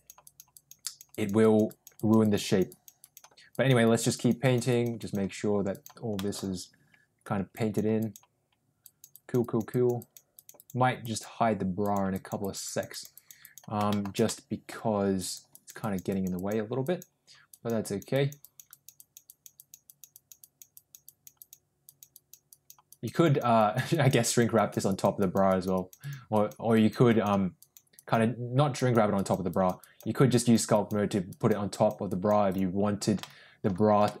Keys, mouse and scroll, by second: 0.2 click, 0.5 click, 0.8 click, 1.0 click, 1.3 click, 1.6 click, 1.9 click, 2.2 click, 2.4 click, 2.9 click, 3.5 click, 3.8 click, 4.1 click, 4.3 click, 4.6 click, 4.9 click, 5.6 click, 6.1 middle click, 7.4 click, 7.9 click, 8.7 click, 9.1 click, 9.3 click, 9.7 click, 9.9 click, 10.3 click, 10.5 click, 11.0 click, 11.7 click, 12.1 click, 12.3 click, 12.6 click, 12.8 click, 13.1 click, 13.4 click, 13.8 shift+middle click, 14.2 middle click, 15.1 click, 15.4 click, 15.7 click, 16.0 click, 16.3 click, 16.8 click, 17.4 click, 17.8 click, 18.1 click, 18.4 click, 18.6 click, 18.9 click, 19.2 click, 19.5 click, 19.8 click, 20.1 click, 20.3 click, 20.7 click, 21.0 click, 21.3 click, 21.8 click, 22.1 click, 22.4 click, 22.8 click, 23.2 click, 23.5 click, 23.9 click, 24.2 click, 24.5 click, 24.8 click, 25.1 click, 25.4 click, 26.0 click, 26.3 click, 26.7 click, 27.0 click, 27.5 click, 27.9 click, 28.7 click, 29.1 click, 29.4 click, 29.7 click, 30.3 click, 30.7 click, 31.2 click, 31.6 click, 32.0 click, 32.4 click, 33.1 middle click, 34.0 middle click.